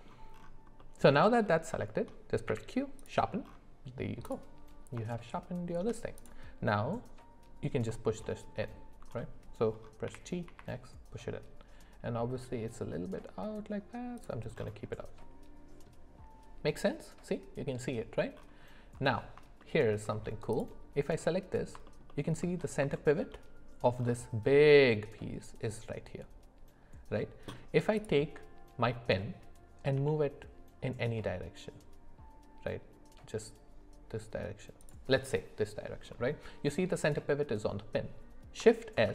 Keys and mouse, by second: 0.8 middle click, 1.8 shift+middle click, 2.5 q, 4.3 click, 5.1 middle click, 6.2 click, 8.6 alt+middle click, 10.1 g, 15.0 middle click, 19.6 shift+middle click, 22.1 alt+middle click, 23.0 shift+middle click, 28.0 click, 29.9 g, 38.9 shift+s.